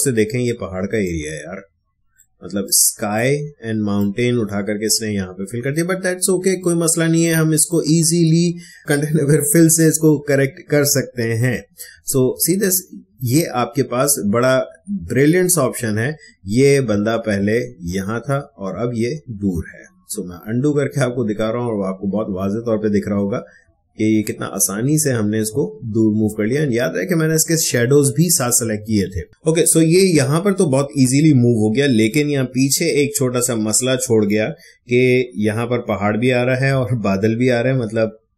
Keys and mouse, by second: 1.0 click, 1.1 space, 2.7 click, 2.7 space, 3.9 click, 4.1 space, 6.5-8.8 ctrl+drag, 11.3 click, 16.2 click, 16.9 ctrl+alt+z, 29.1 ctrl+z.